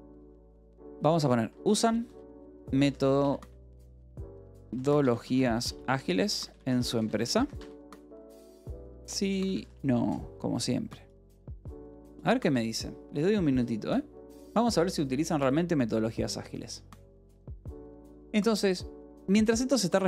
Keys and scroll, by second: 1.0-9.4 typing, 9.4 Tab, 11.2 BackSpace.